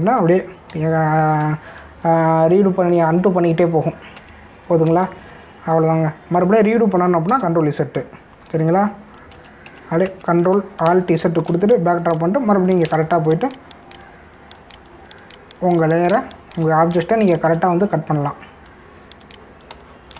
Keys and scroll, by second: 0.0 ctrl+alt+z, 5.2 ctrl+alt+z, 8.3 ctrl+z, 10.3 ctrl+alt+z, 11.8 space, 17.1 space, 18.3 ctrl+alt+z.